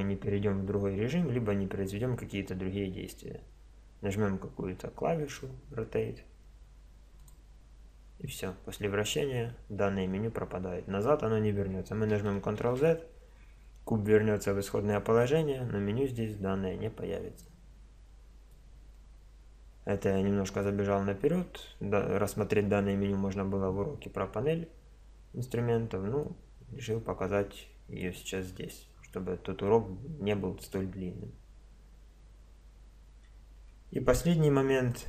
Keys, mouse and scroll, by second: 5.2-7.0 drag, 12.6 ctrl+z, 17.4 click, 17.6 click, 17.8 click, 18.2-19.3 middle drag, 26.2-28.1 drag, 32.2-33.9 middle drag, 33.6 Tab, 34.6 x.